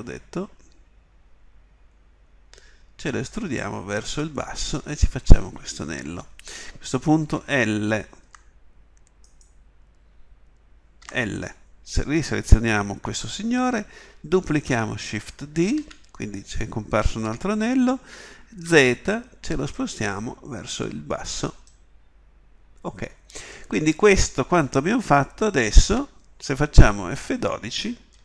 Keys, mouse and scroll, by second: 7.4 l, 8.2 l, 15.6 shift+d.